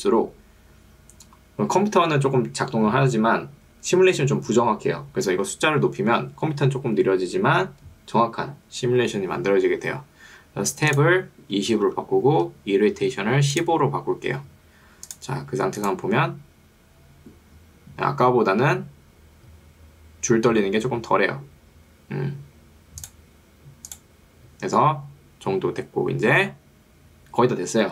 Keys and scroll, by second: 11.8 2, 12.0 0, 12.4 Tab, 13.0 1.